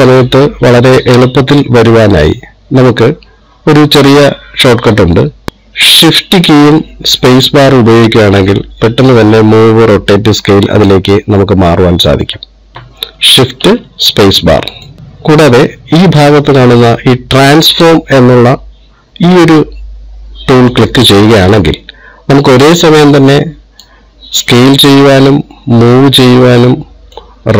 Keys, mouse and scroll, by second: 8.1 shift+space, 12.7 shift+space, 21.2 click, 23.1 click, 25.6 click.